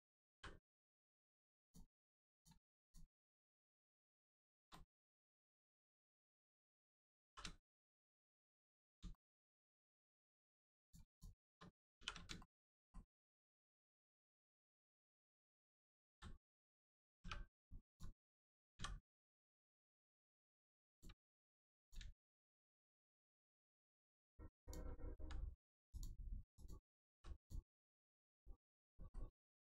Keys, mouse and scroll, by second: 0.3 m, 1.6 click, 2.8 shift+click, 3.3 middle click, 3.8 scroll down 1, 4.2 shift+middle click, 4.7 middle click, 4.8 middle click, 8.6-9.0 scroll up 1, 9.1 shift+middle click, 10.0 scroll up 1, 10.8 click, 11.1 shift+click, 12.0 shift+r, 12.4 shift+middle click, 13.4 middle click, 13.5 middle click, 16.0 ctrl+z, 17.9 click, 19.3 click, 19.7 middle click, 20.9 click, 21.2 x, 21.8 click, 22.2 shift+middle click, 23.0 middle click, 23.1 middle click, 24.6 click, 25.2 x, 25.9 click, 27.0 x, 27.4 click, 27.8 middle click, 28.9 shift+middle click, 29.3 scroll up 1.